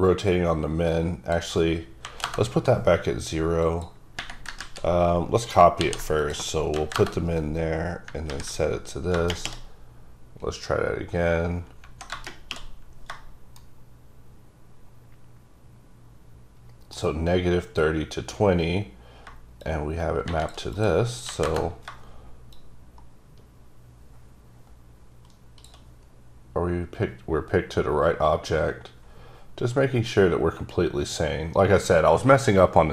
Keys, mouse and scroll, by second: 1.0 click, 2.1 KP_0, 2.3 KP_Enter, 3.8 click, 4.7 z, 5.9 c, 6.3 click, 6.9 KP_0, 7.1 KP_Enter, 8.4 ctrl+v, 19.7 shift+click, 20.8 click, 21.4 KP_0, 21.6 KP_Enter, 22.6 click, 26.2-28.4 scroll up 4.